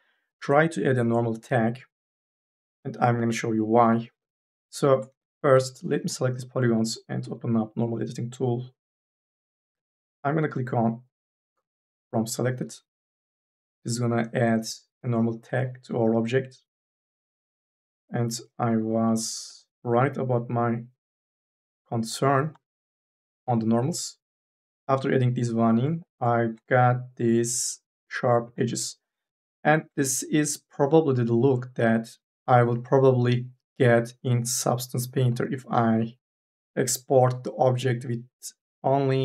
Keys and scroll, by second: 2.4 3, 3.6 e, 22.4 4.